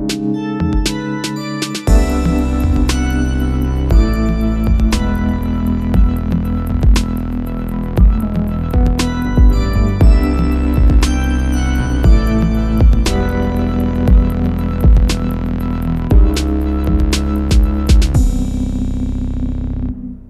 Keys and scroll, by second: 3.3 alt+super+k, 7.8 alt+super+k, 14.3 q.